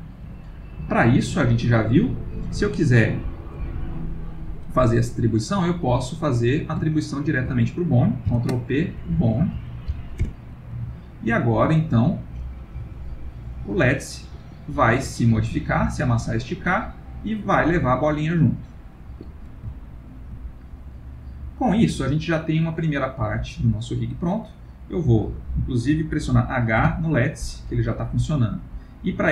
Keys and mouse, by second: 1.4 click, 3.8 middle click, 5.0 middle click, 6.9 shift+click, 8.3 ctrl+p, 9.1 Down, 9.3 Down, 11.3 ctrl+middle click, 12.4 click, 12.8 g, 15.2 click, 15.5 g, 19.8 ctrl+middle click, 20.5 middle click, 22.7 middle click, 22.9 middle click, 24.8 click, 26.8 h, 28.5 click.